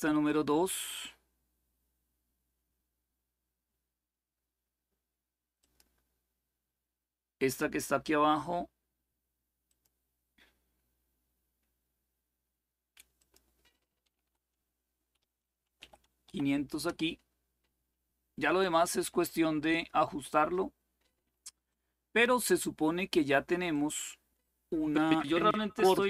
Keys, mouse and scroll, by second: 0.0 click, 5.3 click, 9.4 click, 12.9 click, 13.7 click, 13.8 Delete, 14.0 Delete, 14.9-16.5 typing, 16.6 Return, 21.4 click, 23.5 click.